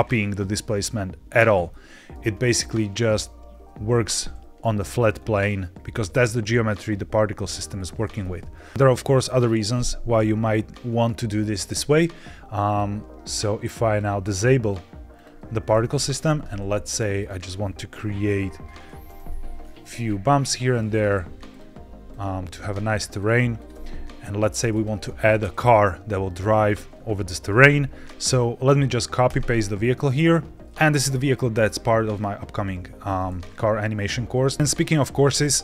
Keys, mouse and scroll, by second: 1.6-2.1 middle drag, 2.1-2.4 scroll down 3, 3.6 z, 4.5-5.7 middle drag, 7.7-8.1 scroll up 2, 8.1 middle click, 8.5 scroll down 2, 12.6 click, 13.8-15.1 drag, 16.1 Tab, 16.4-17.1 scroll down 1, 17.1 click, 18.3 o, 19.0 g, 19.1 z, 19.6-20.5 scroll down 5, 21.4 click, 22.4 g, 22.5 z, 23.1 click, 23.5 click, 23.6 g, 23.7 z, 24.6 click, 25.0 Tab, 25.3-25.9 scroll down 1, 26.6 scroll up 1, 27.0 shift+middle drag, 29.7 ctrl+v, 30.5 middle click, 30.5-31.3 scroll down 6.